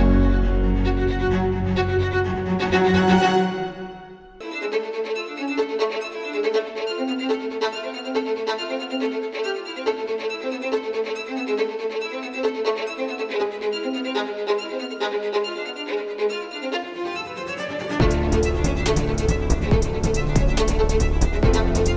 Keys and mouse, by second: 0.9 Tab, 1.8 Tab, 6.5 ctrl+b, 7.8 Tab, 14.7 KP_7, 15.2 z, 19.9 shift+a, 20.9 s.